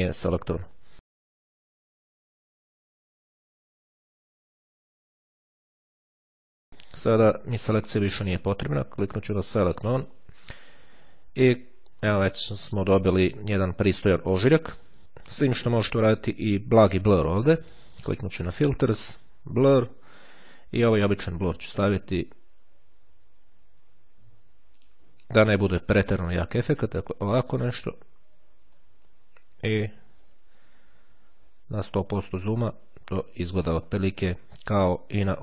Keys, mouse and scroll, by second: 1.8 click, 3.5 click, 7.2 click, 8.0 click, 9.3 click, 10.1 click, 11.9-12.9 ctrl+scroll down 2, 12.9-13.2 ctrl+scroll down 1, 13.9-14.5 scroll up 2, 18.7 click, 23.5-25.5 drag, 28.2-28.7 ctrl+scroll up 2, 28.7-29.9 ctrl+scroll down 2, 32.4-33.1 scroll up 2, 33.3-33.7 scroll down 2.